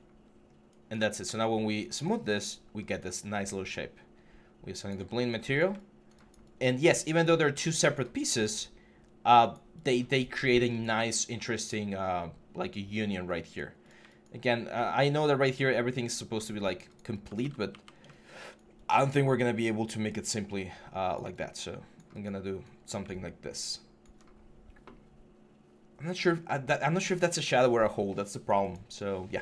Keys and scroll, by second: 0.2 3.